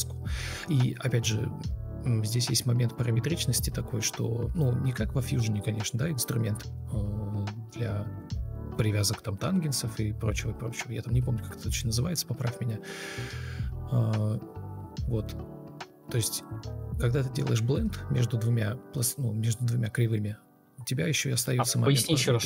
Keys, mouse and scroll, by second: 1.9 ctrl+shift+o, 7.4 ctrl+shift+o, 14.1 ctrl+shift+o, 17.8 1, 17.8 Return.